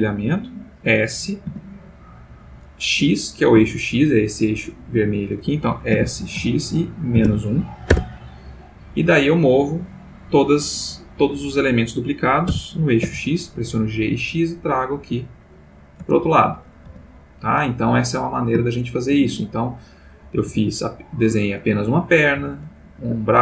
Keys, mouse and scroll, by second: 1.5 s, 3.5 Escape, 5.9 s, 6.4 x, 7.1 -, 7.3 1, 7.9 Return, 12.5 g, 13.0 x, 16.0 space, 16.8 x, 17.1 click, 18.8 shift+middle click, 19.9 click, 20.3 g, 21.2 Escape, 21.9 click, 22.4 g, 23.0 Escape.